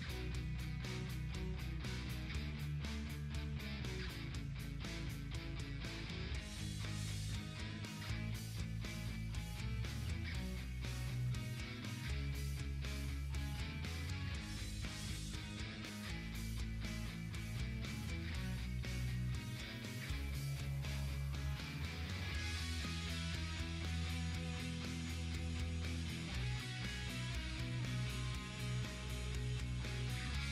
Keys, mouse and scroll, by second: 4.3 click, 5.9-7.0 drag, 7.0 ctrl+z, 8.0 click, 11.5 click, 11.9-12.2 ctrl+scroll up 1, 13.3 ctrl+alt+scroll up 1, 14.9 click, 16.5 click, 17.5 ctrl+z, 18.9 ctrl+z, 19.5 scroll down 1, 21.2-22.6 drag, 22.6 ctrl+alt+scroll down 1, 24.9 click, 25.3 right click, 26.2 click, 27.3-27.9 scroll down 1, 28.0-30.5 drag.